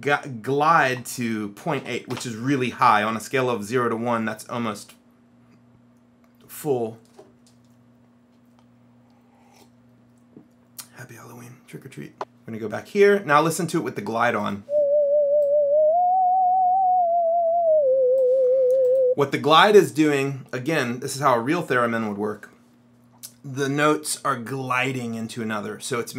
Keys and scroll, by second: 1.0 KP_Decimal, 1.9 KP_8, 2.2 Return.